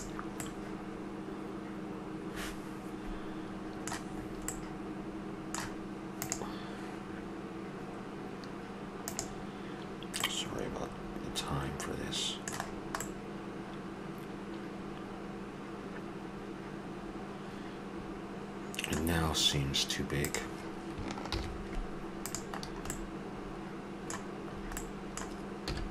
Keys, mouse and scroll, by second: 0.4-2.3 middle drag, 2.4-6.3 middle drag, 10.2 middle click, 11.3-12.6 middle drag, 13.0-14.3 middle drag, 17.6 middle click, 20.2-22.2 drag, 21.3 shift+g, 22.6-24.7 middle drag, 25.7 s.